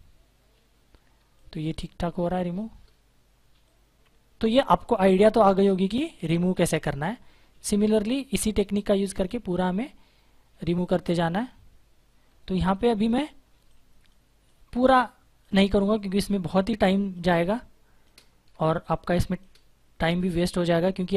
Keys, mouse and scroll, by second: 0.4 space, 0.4 click, 0.7 space, 2.4 click, 12.2 space, 12.4 click, 12.6 space, 20.5 click.